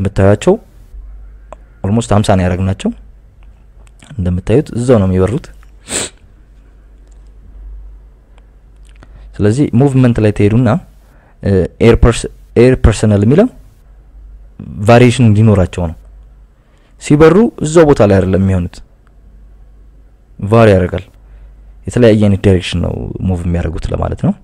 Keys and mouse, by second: 0.6 click, 4.1 click, 4.7 KP_Add, 4.9 KP_Add, 5.1 KP_Add, 5.2 KP_Add, 6.5 drag, 7.3 KP_Subtract, 7.5 KP_Subtract, 7.7 KP_Subtract, 7.8 KP_Subtract, 9.4-11.0 drag, 11.5 click, 12.3 click, 13.4 click, 15.1 click, 18.0 click, 19.3 click.